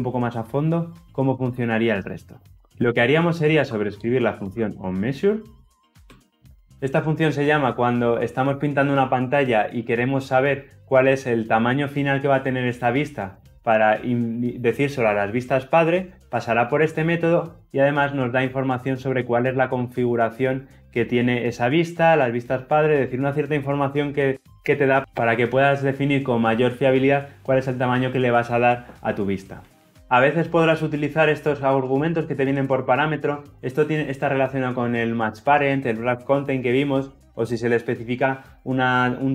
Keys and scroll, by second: 5.8 Return.